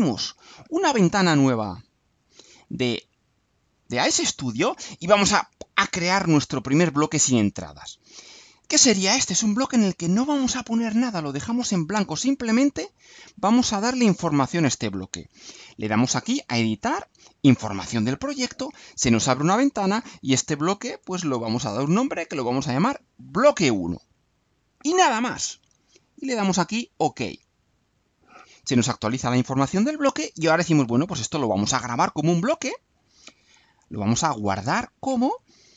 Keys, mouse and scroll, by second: 0.4 click, 2.2-4.8 drag, 17.6 click, 19.8 click, 21.0-22.7 typing, 26.8 click, 33.6 click, 35.2 click.